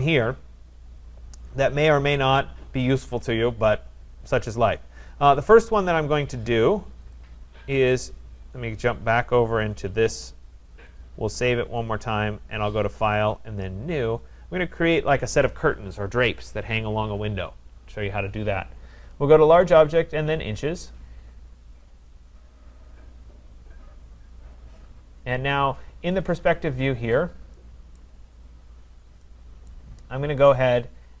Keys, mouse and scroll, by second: 4.7 click, 7.1 click, 9.7 click, 11.0 click, 11.9 click, 13.1 click, 14.2 click, 19.8 click, 20.0 click, 26.2 click, 26.5 click, 27.1 scroll down 4, 27.8 middle click, 28.0 right click, 28.2 middle click, 28.3-28.8 scroll, 29.7 right click.